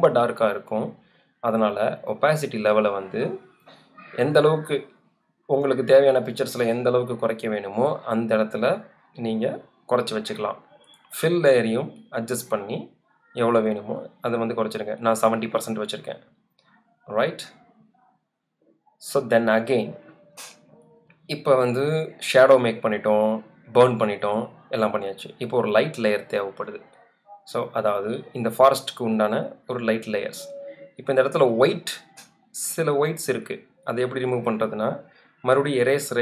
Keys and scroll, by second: 28.6 z, 32.8 e.